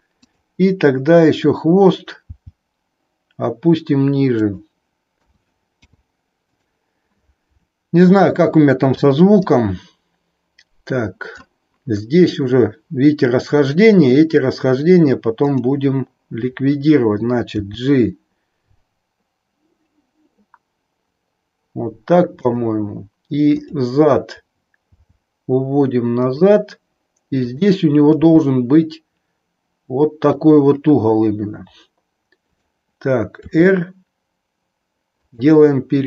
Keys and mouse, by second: 0.1 click, 2.2 g, 5.2 a, 5.8 i, 9.5-11.5 drag, 15.4 click, 17.6 g, 22.4 click, 25.0 g, 27.5 click, 30.4 click, 33.5 r, 35.4 click.